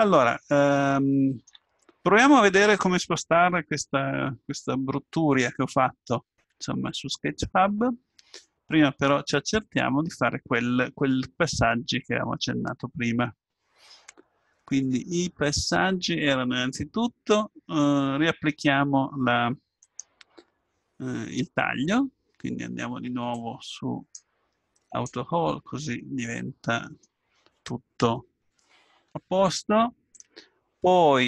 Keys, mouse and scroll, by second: 0.6-3.6 middle drag, 12.4-13.9 middle drag, 23.3-26.7 drag, 25.9-31.2 middle drag.